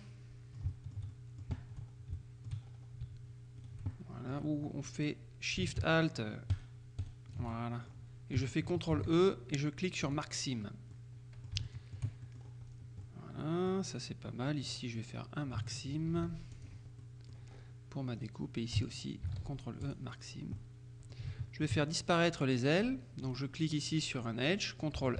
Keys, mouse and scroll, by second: 0.0 middle click, 0.8-1.9 shift+middle drag, 1.9-2.3 shift+scroll up 2, 2.3 shift+middle click, 2.7-3.3 scroll up 2, 3.7 right click, 4.0 click, 4.0 middle click, 6.6-7.7 alt+shift+right drag, 7.6 alt+shift+click, 9.0 ctrl+e, 10.1 click, 10.5-11.0 scroll down 2, 11.0 click, 11.7 shift+middle click, 11.8-12.3 shift+scroll down 2, 12.3 shift+middle click, 12.4-13.0 shift+scroll down 2, 13.0 scroll down 1, 13.1 middle click, 14.7 right click, 16.2 ctrl+e, 16.6 ctrl+click, 17.1 ctrl+middle click, 17.6-18.2 scroll up 2, 18.3 right click, 19.9 ctrl+e, 19.9 ctrl+click, 20.3-20.7 scroll down 1, 20.7 middle click, 21.4 shift+middle click, 23.3 right click.